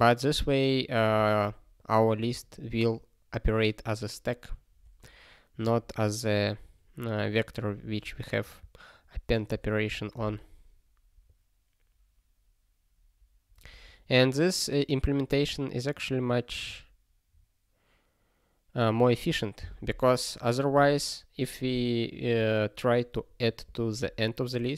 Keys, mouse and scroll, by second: 15.0 click, 16.7 click, 18.9 click.